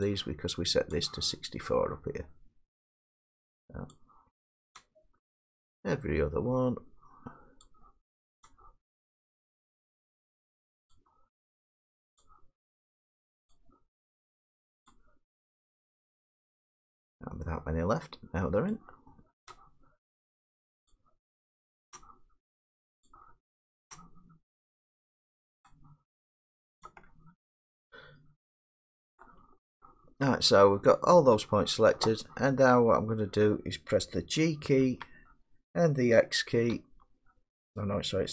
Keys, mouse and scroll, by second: 1.0 shift+click, 5.9 shift+middle click, 8.5 shift+click, 18.8 shift+middle click, 20.9 shift+click, 27.4 scroll, 27.6 middle click, 27.9 middle click, 28.3 middle click, 29.2 shift+middle click, 30.1 middle click, 30.2 middle click, 30.2 middle click, 34.8 g, 36.7 x.